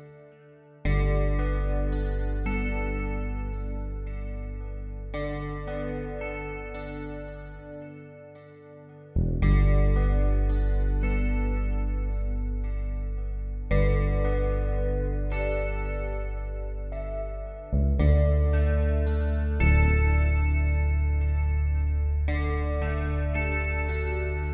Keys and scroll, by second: 11.5 space, 12.8 x, 13.4 b, 16.5 typing, 18.9-19.6 typing.